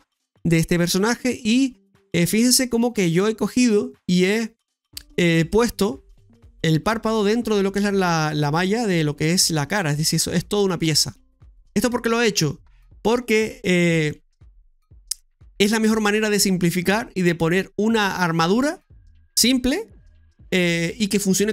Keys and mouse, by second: 0.9 middle click, 2.4 middle click, 8.5-10.0 middle drag, 14.0 middle click.